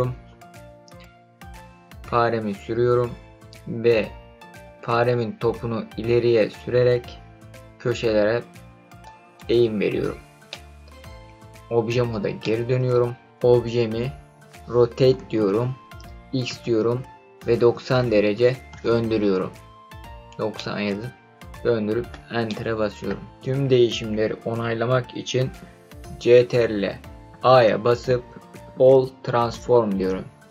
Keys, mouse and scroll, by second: 5.4-9.0 scroll up 4, 9.0 click, 10.5-11.2 middle drag, 11.2 Tab, 12.4-13.2 middle drag, 15.1 r, 16.4 x, 17.5 KP_9, 18.0 KP_0, 18.7 KP_Enter, 20.5-22.1 middle drag, 22.4 middle click, 27.3 ctrl+a.